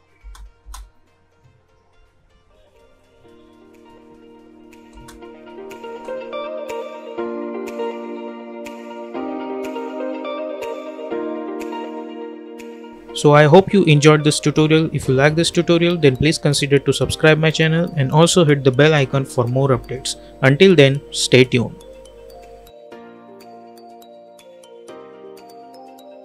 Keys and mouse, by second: 0.2 space, 4.9 space.